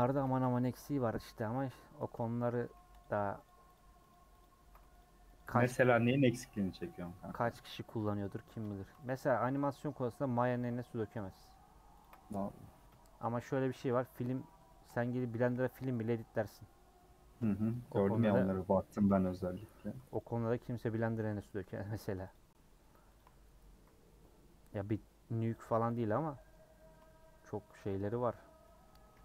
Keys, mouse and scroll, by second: 0.1 ctrl+click, 1.7 ;, 2.0 middle click, 2.7 3, 3.0 click, 3.5 ctrl+click, 3.7 ctrl+click, 4.1 ctrl+click, 4.4 ctrl+click, 5.0 shift+click, 5.4 shift+click, 6.1 ;, 6.5 scroll down 1, 6.6-9.0 middle drag, 9.8-11.1 middle drag, 11.1 click, 11.3 middle click, 12.0 ctrl+click, 13.5 middle click, 14.0 scroll up 4, 14.3 3, 14.7-15.9 shift+middle drag, 15.9 c, 18.0-18.4 scroll down 2, 18.4 middle click, 19.0 ;, 19.8 3, 20.2 alt+click, 21.2 ;, 21.7-22.3 scroll up 1, 22.3 click, 23.9 scroll down 1, 24.2-25.5 middle drag, 25.5 click, 25.9 click, 26.3-27.8 middle drag, 27.8 shift+click, 28.4 scroll down 3, 28.7 middle click, 29.0 a.